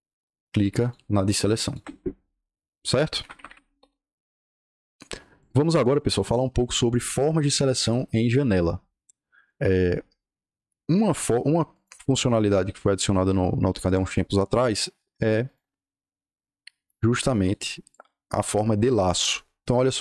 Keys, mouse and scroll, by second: 0.0 shift+click, 0.7 shift+click, 1.5 shift+click, 3.3 Escape, 3.7 o, 4.0 Return, 11.6 click, 13.2 click, 15.4 click, 17.3 click, 17.8-19.1 drag.